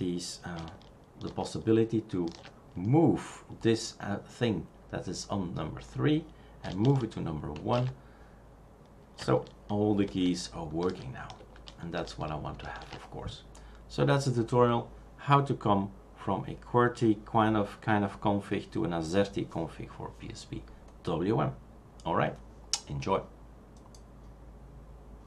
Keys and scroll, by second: 1.3 shift+super+3, 7.5 shift+super+1, 10.0 shift+super+4, 10.8 shift+super+5, 11.4 shift+super+6, 11.9 shift+super+4.